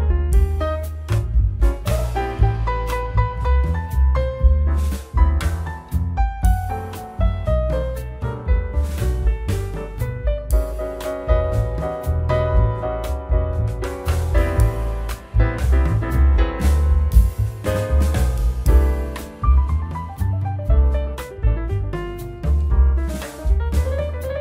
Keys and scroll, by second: 4.7 shift+q, 14.1 Tab, 14.9 ctrl+s.